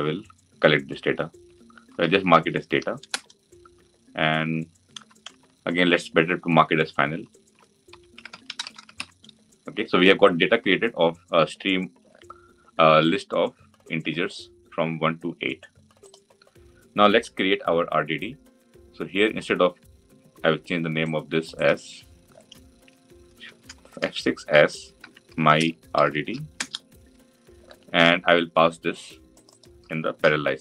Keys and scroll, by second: 23.6 shift+F6, 30.0 ctrl+c.